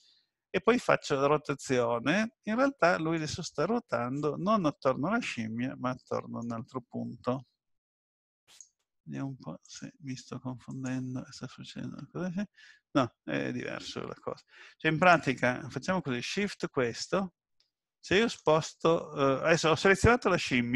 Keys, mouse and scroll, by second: 0.9 middle click, 3.6 middle click, 8.5 click, 9.6 click, 16.3 shift+middle click.